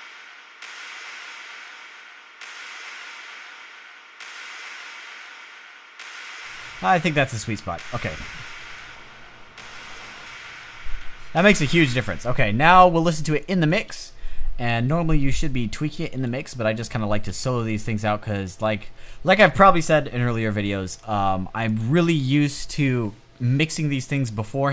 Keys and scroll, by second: 11.3 space.